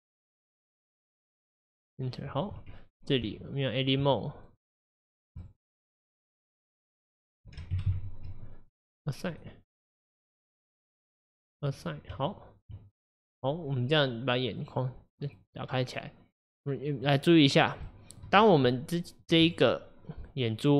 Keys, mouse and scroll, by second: 2.1-3.1 scroll up 2, 4.0 Tab, 4.5 click, 5.7 shift+click, 6.0 shift+click, 6.2 shift+click, 6.5 shift+click, 7.2 shift+click, 7.7 ctrl+KP_Add, 7.9 ctrl+KP_Add, 9.4-11.3 drag, 11.8 click, 12.7 Tab, 13.1-13.6 scroll down 2, 14.6 click, 15.3 click, 15.9-17.3 middle drag, 17.3-17.7 scroll up 3, 17.9 shift+middle click, 18.4-18.7 scroll down 2, 18.7 middle click, 19.5 click.